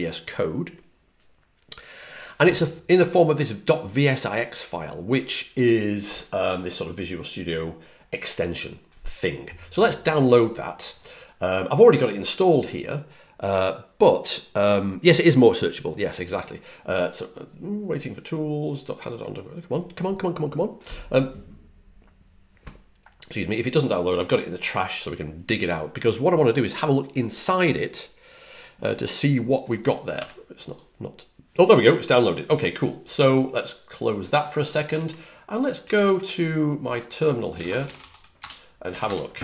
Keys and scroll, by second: 34.8 super+Tab, 35.7 super+Tab, 35.9 super+Tab, 37.2-39.3 typing.